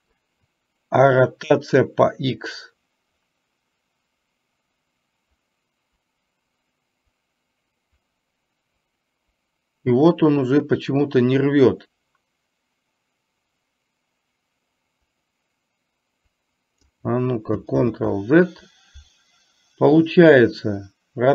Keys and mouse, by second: 2.0-17.0 drag, 18.0 ctrl+z.